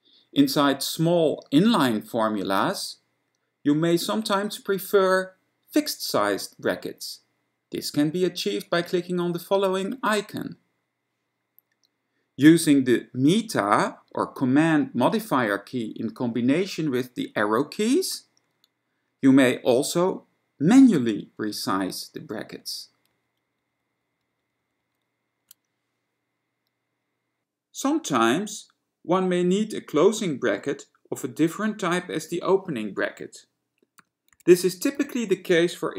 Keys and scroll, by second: 21.9 super+Up, 22.3 super+Up, 22.5 super+Up, 22.6 super+Up, 23.2 super+Down, 23.4 super+Down, 23.7 super+Down, 23.9 super+Down, 24.1 super+Down, 24.3 super+Down, 24.5 super+Down, 24.7 super+Down, 24.9 super+Down, 34.0-35.7 typing.